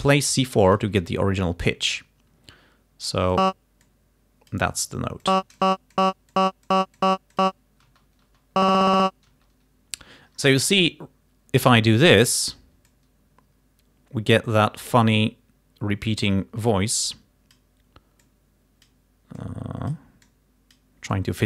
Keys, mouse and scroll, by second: 1.1 d, 3.4 click, 3.9 click, 5.3 click, 5.7 click, 6.0 click, 6.4 click, 6.7 click, 7.4 click, 7.9 space, 9.4 space, 10.8 scroll down 2, 11.3 scroll up 2, 13.0 click, 19.5-21.0 scroll up 4, 21.2-21.4 scroll up 2.